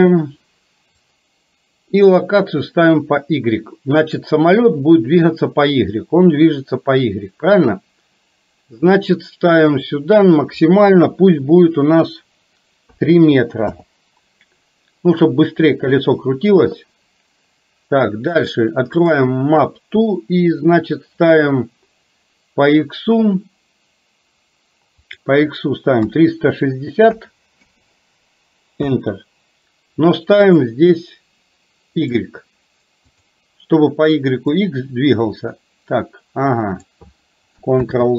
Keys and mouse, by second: 9.7-13.7 drag, 25.1-29.0 drag, 30.5-32.2 drag, 34.6-36.9 drag, 37.9 ctrl+z.